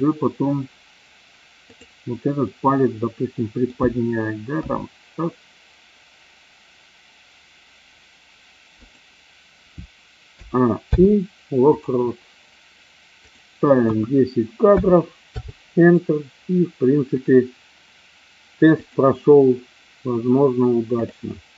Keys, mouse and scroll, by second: 1.6-2.1 drag, 2.4-3.7 middle drag, 4.6 g, 8.8 click, 10.2 a, 10.7 i, 13.3-15.6 drag, 19.0 click, 20.9 click.